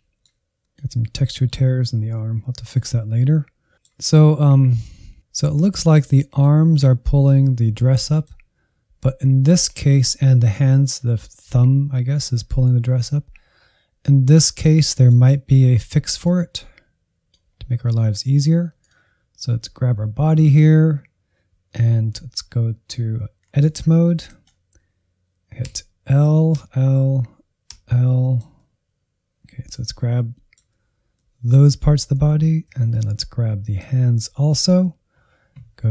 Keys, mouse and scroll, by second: 0.6-1.8 drag, 2.0 click, 2.7-4.5 middle drag, 4.5-6.7 drag, 7.9-12.4 middle drag, 14.5-16.5 middle drag, 16.5-18.0 drag, 18.0 Insert, 18.7-21.7 drag, 23.5 Tab, 24.4 3, 25.6 l, 26.5 l, 28.3-32.1 middle drag, 32.1 alt+z, 32.9 shift+click, 33.9-35.9 shift+drag.